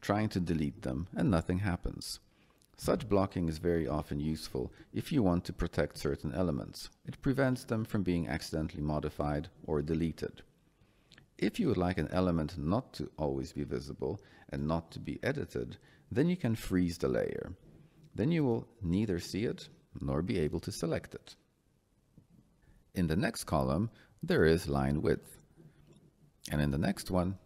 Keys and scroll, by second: 2.3 Delete.